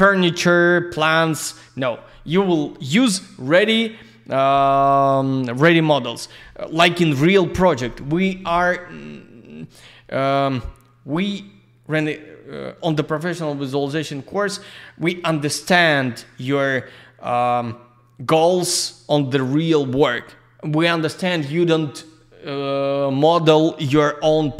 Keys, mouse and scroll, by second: 9.2 scroll down 1.